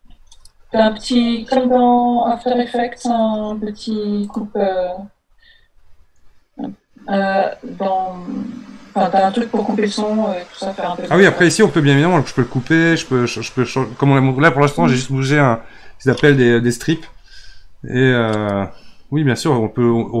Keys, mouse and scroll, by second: 0.7-1.1 scroll down 14, 4.2-7.4 drag, 18.7 scroll down 3, 19.2 scroll up 3, 19.9-20.2 scroll up 1.